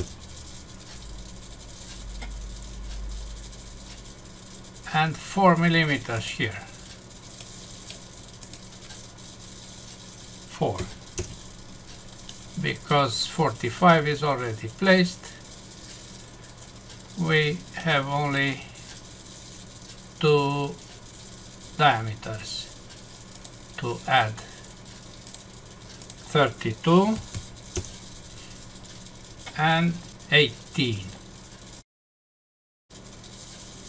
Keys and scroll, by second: 0.0 Return, 11.1 Return, 12.2 Num_Lock, 27.7 Return.